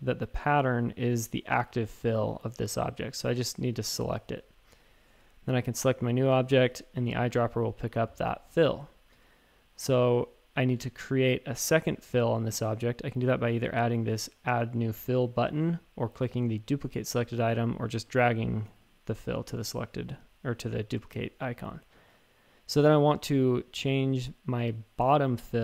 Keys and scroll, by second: 6.2 typing.